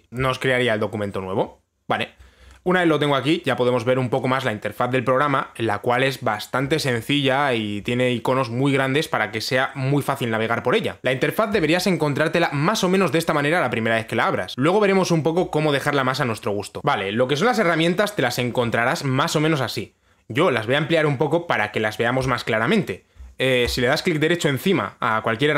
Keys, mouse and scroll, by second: 16.8 right click, 16.8 click, 24.3 right click.